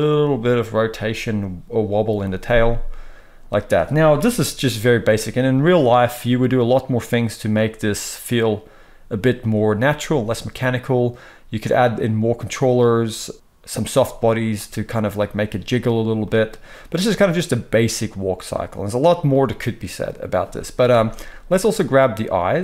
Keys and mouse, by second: 4.2 KP_3, 7.1-10.9 middle drag, 16.2-16.8 middle drag, 20.8 space, 21.8-22.3 middle drag, 22.3 click, 22.4 middle click.